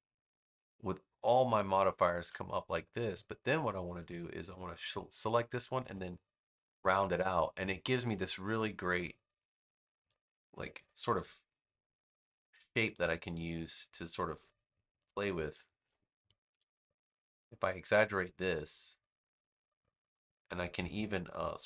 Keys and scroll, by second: 15.6 super+z.